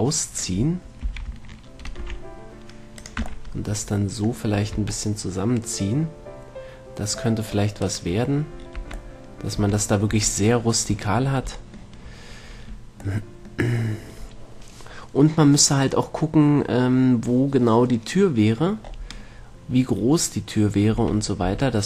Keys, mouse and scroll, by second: 1.3 s, 3.5-4.5 drag, 3.5 a, 3.7 middle click, 5.0 Tab, 8.1-9.4 right drag, 9.1 Tab, 9.4-10.4 middle drag, 10.4 Tab, 21.2 Tab, 21.7 Tab.